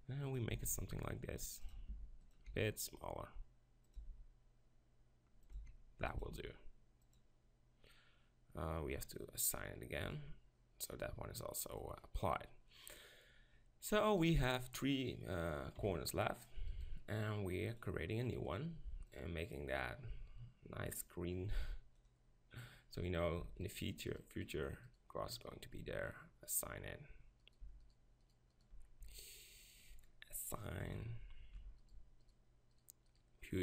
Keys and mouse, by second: 0.6 s, 2.0 g, 2.6 s, 3.7 click, 4.1 g, 5.6 s, 6.3 g, 8.9 click, 10.2-11.9 drag, 11.9 middle click, 12.3-14.2 middle drag, 14.2-15.8 right drag, 15.8 KP_7, 16.7-20.9 drag, 23.7-26.6 right drag, 26.6 middle click, 26.9 click, 27.5 middle click.